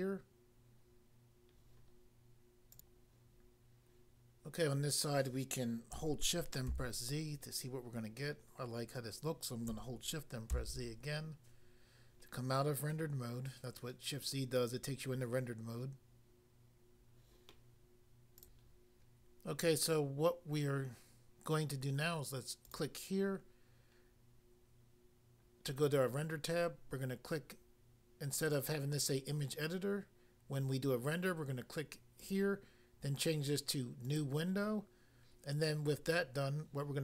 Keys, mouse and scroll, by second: 2.7 click, 2.9 click, 6.7 z, 10.5 z, 18.4 click, 22.6 click, 22.7 click, 32.3 click, 34.1 click, 34.2 click.